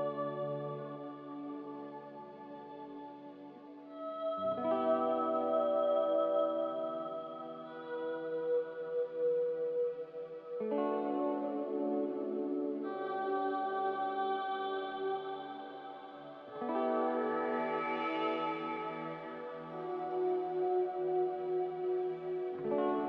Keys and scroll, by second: 3.7 F9, 3.7 z, 7.6 4, 8.6-9.4 typing.